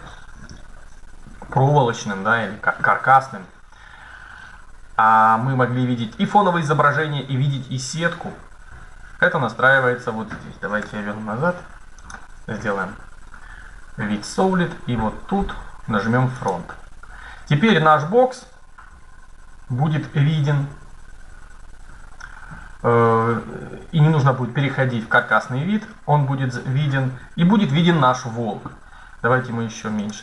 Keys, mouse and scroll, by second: 10.5 z, 16.0-18.0 drag, 17.2 middle click, 17.6-19.5 middle drag, 20.5-22.4 middle drag, 29.7-30.2 drag.